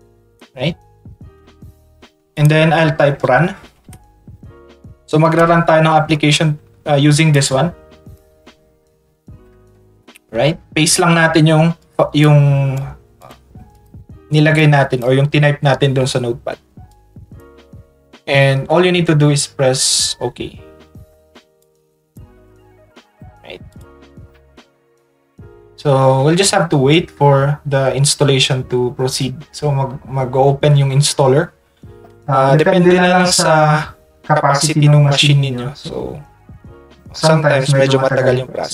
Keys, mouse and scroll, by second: 2.3 click, 7.3 click, 10.6 ctrl+v, 11.8 click, 12.2 click, 13.2 click, 13.7 click, 14.6 click, 16.9-17.4 drag, 21.6 ctrl+click, 23.7 click.